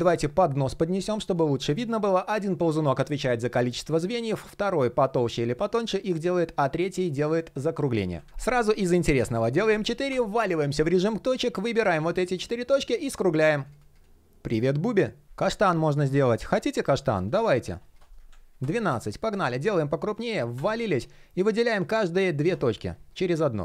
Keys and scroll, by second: 7.7 super+z.